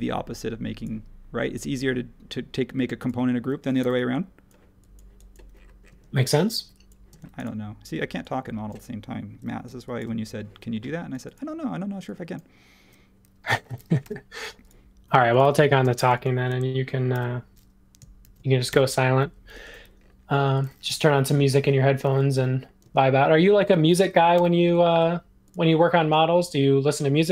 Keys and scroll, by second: 3.8 e, 6.5 e, 7.1 space, 14.0 l, 15.4 e, 17.1 super+g, 17.1 typing, 18.2 shift+g, 18.7 Return, 20.3 space, 21.5 super+1, 22.3 |, 23.5-24.3 typing.